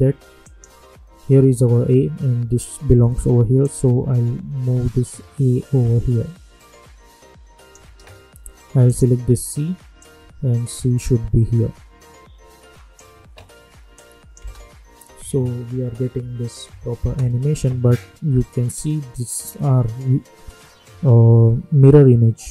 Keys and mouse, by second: 0.4 click, 3.6-13.9 drag, 13.9 click, 14.3 space, 17.1 space.